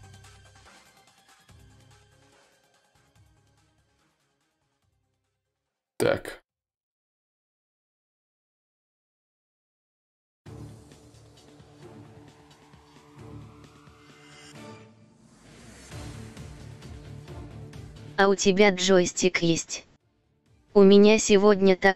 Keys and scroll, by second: 3.2 1.